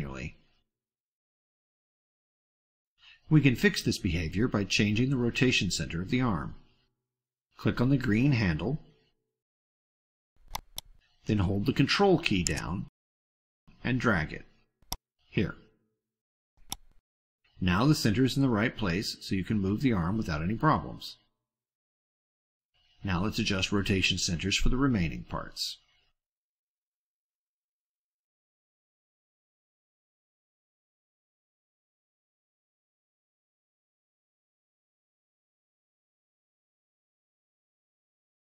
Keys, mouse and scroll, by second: 1.1-2.0 drag, 2.2 click, 3.5 click, 15.2-17.0 ctrl+drag, 20.2-20.7 drag, 21.5 click, 22.3 click, 23.4 click, 24.2 click, 24.6 click, 25.0-25.7 drag, 27.8 click, 28.9-29.3 middle drag, 29.3-30.1 ctrl+scroll up 2, 30.4-31.2 ctrl+drag, 31.4 drag, 32.2 click, 32.5 ctrl+click, 32.9 click, 33.4 click, 33.9 drag, 34.1 middle click, 34.4 ctrl+scroll down 2, 34.6 ctrl+middle click, 35.0 click, 35.3-35.9 ctrl+drag, 36.0 click, 36.5 click, 37.0 middle click, 37.5 click, 37.8 ctrl+scroll up 2, 38.0 ctrl+middle click, 38.2-38.5 ctrl+drag.